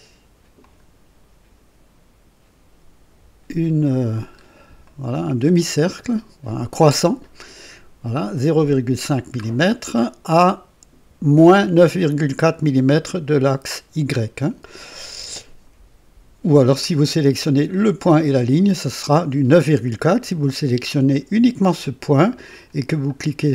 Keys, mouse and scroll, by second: 0.5 click, 4.2-4.6 scroll up 1, 4.8 right click, 4.8 middle click, 9.3-9.7 scroll down 2.